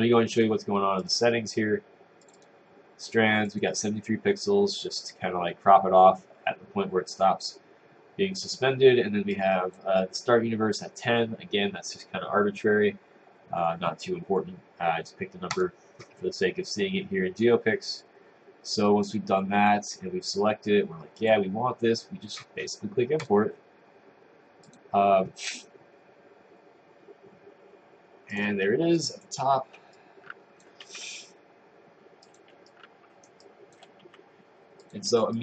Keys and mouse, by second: 30.0 click, 32.3 click, 32.7 right click, 33.5 click, 34.9 click.